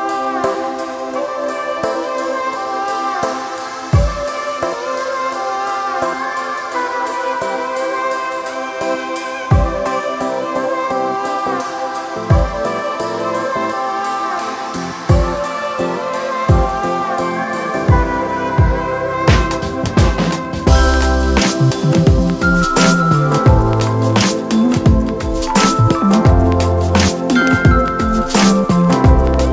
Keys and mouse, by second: 1.9-5.7 drag, 7.4 click, 9.9 click, 11.0 click, 13.4 click, 14.3 click, 15.6 click, 15.8 ctrl+=, 17.6-20.7 drag, 20.7 click, 25.5-26.4 typing, 27.5 click.